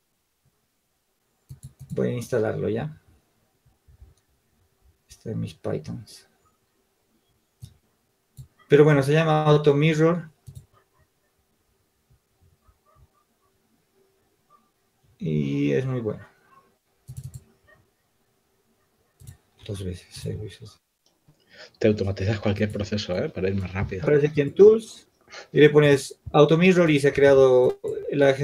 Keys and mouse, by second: 24.7-28.4 drag, 28.2 Tab.